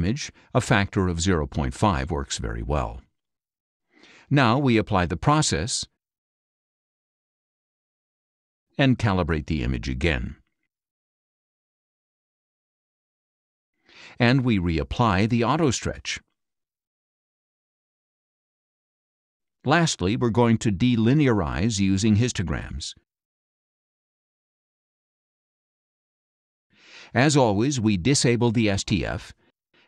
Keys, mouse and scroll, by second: 0.6 shift+Left, 1.8 KP_5, 2.3 BackSpace, 4.7 click, 7.2 click, 9.8 click, 15.4 click, 18.1 click, 19.2-20.4 drag, 21.0-22.8 drag, 23.7 click, 25.8 click, 28.0 click, 29.7-29.8 scroll up 1.